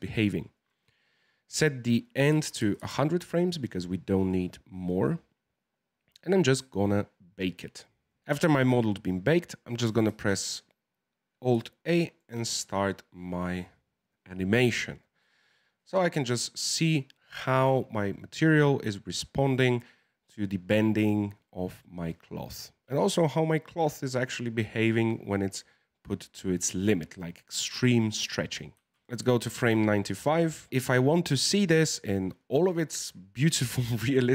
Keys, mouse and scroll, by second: 0.5-2.7 drag, 2.7 KP_0, 8.0 click, 10.0 alt+a, 11.8-14.9 shift+middle drag, 28.9 alt+a, 29.0 drag, 29.3-34.3 shift+middle drag.